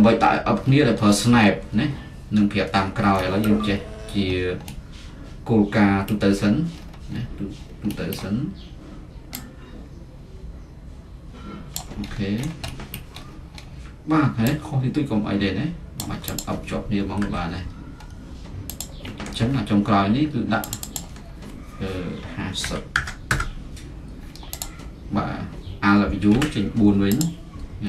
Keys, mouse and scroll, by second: 0.0-3.1 middle drag, 0.7-1.1 scroll, 3.4 middle click, 3.5-4.0 scroll, 5.3-10.2 middle drag, 6.3-7.3 scroll, 7.8 scroll, 11.7 click, 12.1-13.0 scroll up 8, 13.0-13.7 scroll down 4, 13.7-15.7 middle drag, 13.7 scroll, 15.9-17.2 drag, 17.2 z, 18.1 middle click, 18.8-22.6 drag, 22.6-22.9 typing, 23.2 Return, 24.6-26.2 drag, 26.4 alt+w, 27.1 click, 27.8 z.